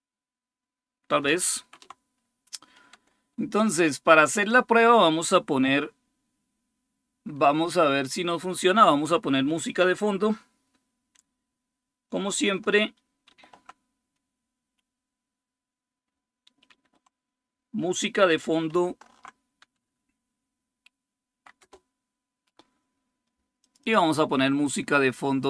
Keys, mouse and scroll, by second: 1.0-1.7 typing, 2.7 Return, 2.7 typing, 13.1 super+6, 16.5 super+8, 18.5 alt+super+d, 21.1 Down, 21.4 Return, 23.4 click.